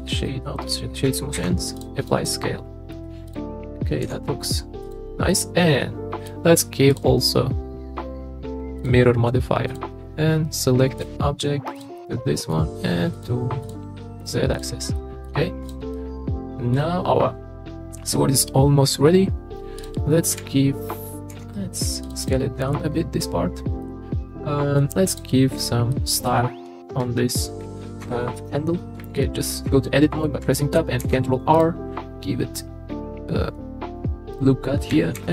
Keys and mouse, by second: 0.3-0.7 middle drag, 1.4 ctrl+a, 2.0 click, 2.2-2.9 middle drag, 3.3 click, 4.0 s, 4.8 click, 5.3-6.3 middle drag, 7.0-8.9 drag, 9.7-11.8 drag, 12.0-12.5 middle drag, 13.1 click, 13.6 click, 14.2 click, 14.6 click, 15.0 middle drag, 15.9-16.7 middle drag, 20.3 KP_3, 21.3 s, 22.2 drag, 23.8-24.1 middle drag, 24.4-24.8 middle drag, 25.1 click, 25.9 middle click, 28.4 Tab, 31.0 ctrl+r, 34.3 click, 35.1 ctrl+r.